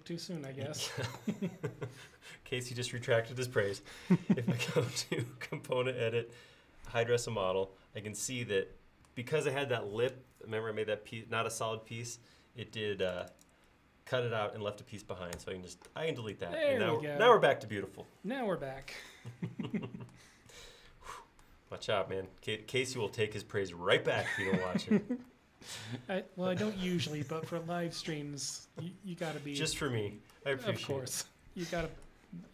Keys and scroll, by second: 15.4 BackSpace.